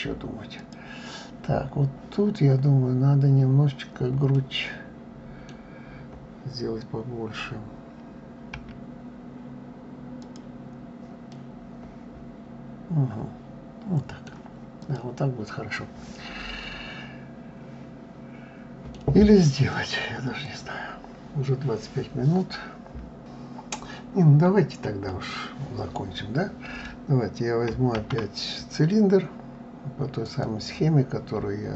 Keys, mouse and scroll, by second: 0.2 click, 3.9-7.0 middle drag, 10.9-14.0 middle drag, 14.4 click, 15.1-18.1 middle drag, 25.1-27.9 middle drag, 27.9 shift+a.